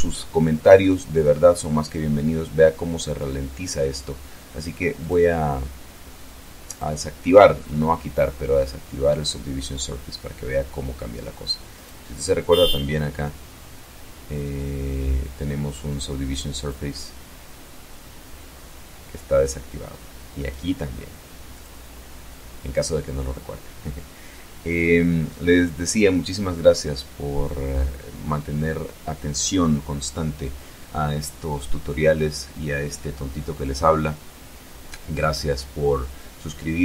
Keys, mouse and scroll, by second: 3.7 click, 5.4 click, 6.3-10.1 middle drag, 10.1 scroll up 1, 10.4 right click, 15.2 click, 18.1 click, 19.0 right click, 20.2 click, 21.4 click, 23.0-23.4 scroll down 1, 24.2-26.3 middle drag, 26.4-27.0 scroll up 2.